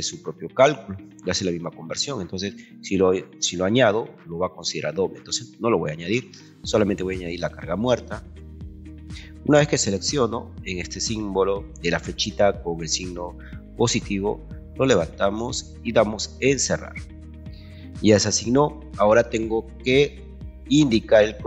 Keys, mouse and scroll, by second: 14.7 click, 16.7 click, 19.9 ctrl+2.